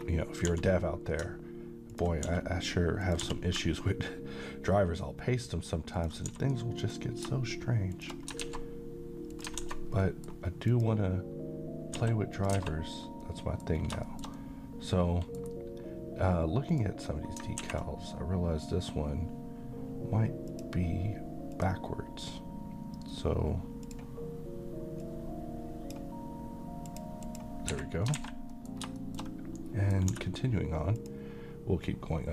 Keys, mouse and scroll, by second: 0.5 g, 1.9 ctrl+click, 2.3 s, 3.0 click, 3.2 g, 6.0 ctrl+click, 6.3 s, 6.8 click, 7.9 shift+click, 8.4 alt+x, 9.3 click, 9.6 a, 10.0 middle click, 10.7 click, 12.0 s, 12.4 click, 12.6 alt+a, 13.0-13.3 scroll down 1, 13.3-13.8 middle click, 13.8 scroll down 1, 14.0-15.6 middle drag, 16.7 click, 20.5-25.9 drag, 26.9 click, 27.7 Escape, 28.2 a, 28.5 middle click, 29.0 shift+middle click, 29.6-30.2 middle click, 30.1 d, 31.0 click.